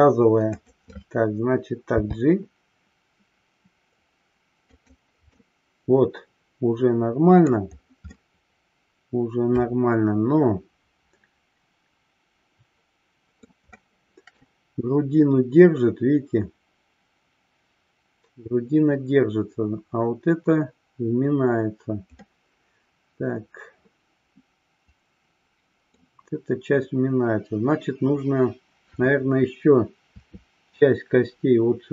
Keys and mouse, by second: 0.6 click, 5.3-7.5 middle drag, 8.1-13.5 middle drag, 13.8-14.3 shift+middle drag, 22.3-26.0 middle drag, 30.1 KP_3.